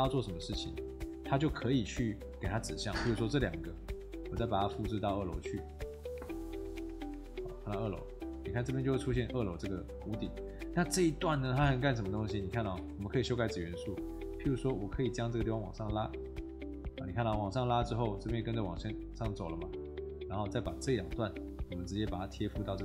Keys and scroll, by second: 8.5 Escape, 18.5 Escape, 20.1 Escape, 20.7 Tab.